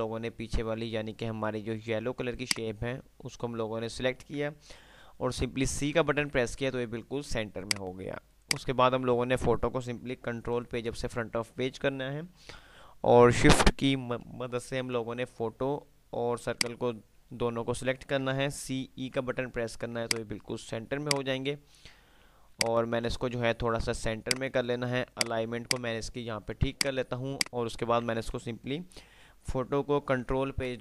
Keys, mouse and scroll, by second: 2.3 shift+click, 6.1 c, 7.8 click, 10.5 shift+Page_Up, 15.8 shift+Page_Up, 16.5 shift+click, 19.0-19.3 typing, 20.3-22.8 drag, 22.8-23.5 ctrl+drag, 25.3 F2, 27.0 click, 30.5 shift+Page_Down.